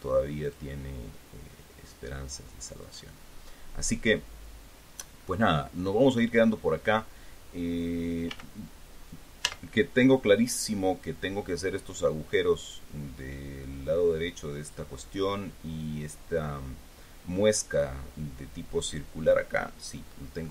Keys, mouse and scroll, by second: 0.0 ctrl+r, 0.8 click, 3.2 click, 8.6 a, 9.8 z.